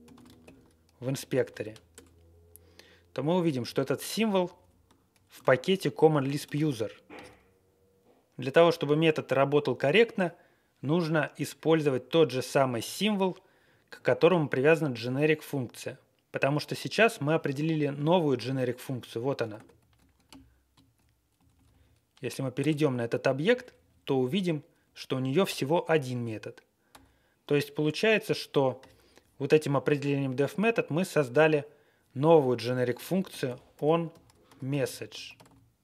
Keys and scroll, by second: 0.1 ctrl+c, 0.4 shift+i, 1.3 ctrl+a, 3.1 Down, 3.6 Up, 4.2 Down, 4.3 Down, 4.5 Down, 6.4 ctrl+x, 19.9 Up, 20.2 alt+f, 20.5 alt+f, 20.5 alt+f, 20.5 alt+f, 20.6 alt+f, 20.6 alt+f, 21.3 Left, 21.5 Left, 21.6 Left, 22.5 Return, 22.7 typing, 23.4 Down, 23.6 Down, 23.8 Down, 24.0 Down, 24.1 Down, 24.7 Up, 25.3 Page_Down, 26.9 Down, 26.9 typing, 33.0-35.3 typing.